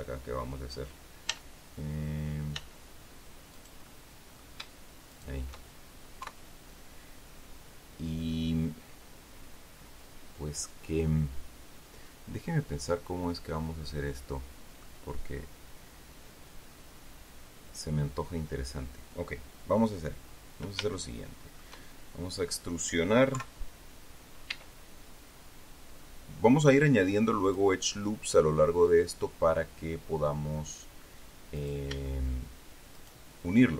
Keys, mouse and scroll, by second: 1.1 z, 2.4 z, 3.4 right click, 3.7 middle click, 5.0 shift+right click, 6.1 KP_3, 12.8-14.9 right drag, 20.8 shift+right click, 23.2 KP_3, 24.4 e, 27.3 click, 31.4 right click, 32.8 shift+right click.